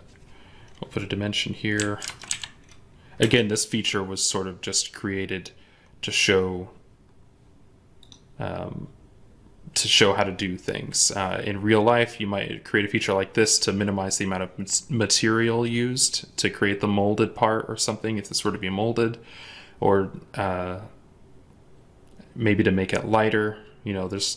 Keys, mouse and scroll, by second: 1.7-2.2 typing, 3.1 Return, 6.8 scroll down 1, 12.2-14.3 scroll down 1, 18.8-19.6 scroll up 1.